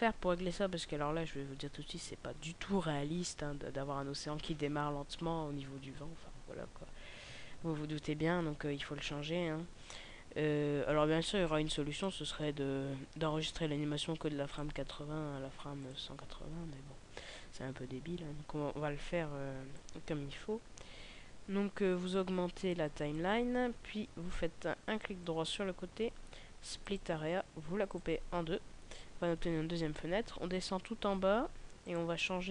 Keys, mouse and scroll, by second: 11.8 click, 14.5 click, 19.6 click.